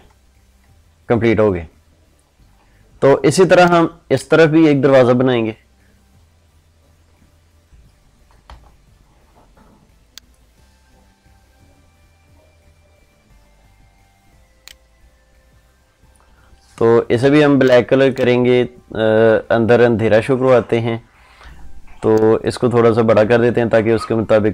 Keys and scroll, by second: 3.0 ctrl+space.